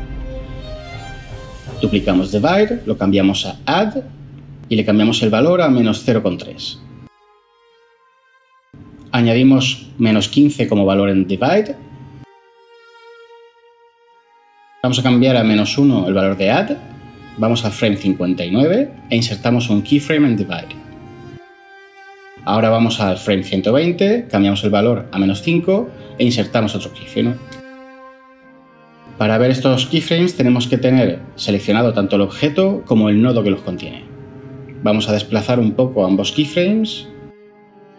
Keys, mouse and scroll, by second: 2.4 shift+d, 6.1-6.8 typing, 11.0-11.4 typing, 11.6 Return, 15.3-15.8 typing, 18.5 Left, 24.6-24.9 typing, 25.2 Return.